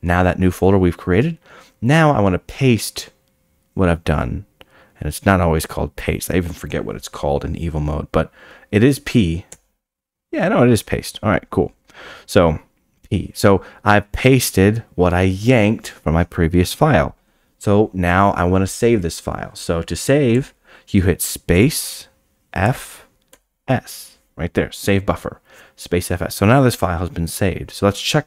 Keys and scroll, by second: 9.2-10.0 typing, 21.6 space.